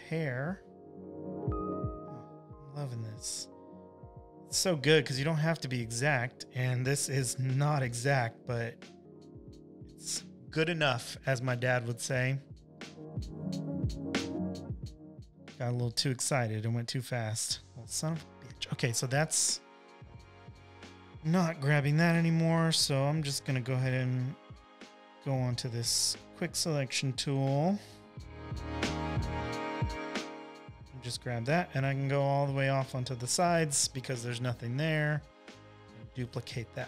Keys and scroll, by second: 16.5 super+z, 19.8 super+z, 20.5 space, 21.0 space, 21.1 space.